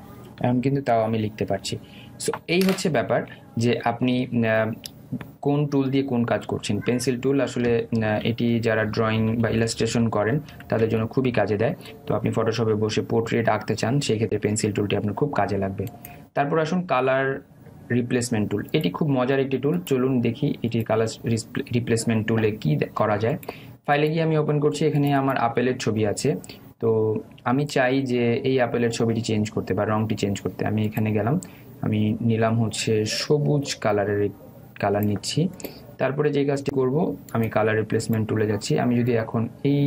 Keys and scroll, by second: 9.6 ctrl+alt+z.